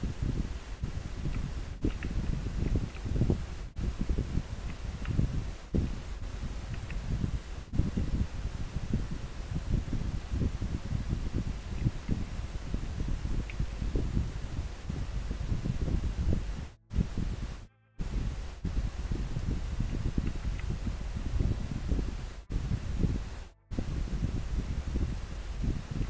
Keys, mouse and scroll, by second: 2.7 scroll down 1, 4.7 scroll up 1, 9.7-10.1 scroll down 1, 10.1-10.5 scroll up 1, 10.5 scroll down 1, 11.8 scroll up 1, 20.6 scroll up 1.